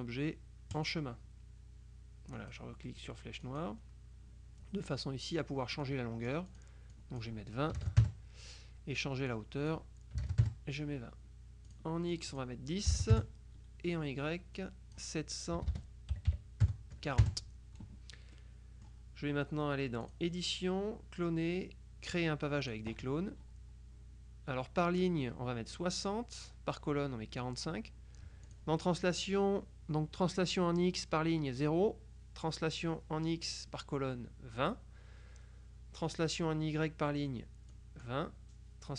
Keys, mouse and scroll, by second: 0.8 click, 2.5 click, 3.5 click, 5.9-7.2 drag, 7.8 KP_2, 8.1 KP_Enter, 9.4-10.3 drag, 10.2 KP_2, 10.3 KP_0, 10.5 KP_Enter, 11.8 click, 13.0 KP_0, 13.2 KP_Enter, 14.6-15.5 drag, 15.7 BackSpace, 16.2 KP_7, 16.4 KP_4, 16.7 KP_0, 18.4 click, 19.0 middle click, 20.1 click, 22.7 click, 25.9 click, 27.5 click, 28.6 click, 37.8 click.